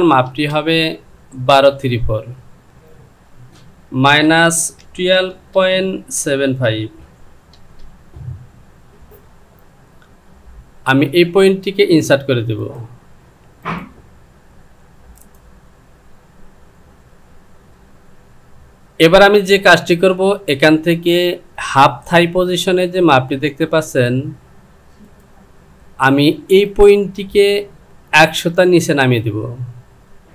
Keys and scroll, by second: 0.3 space, 3.0 Down, 4.1 KP_Subtract, 5.6 KP_Decimal, 6.7 KP_5, 7.6 Return.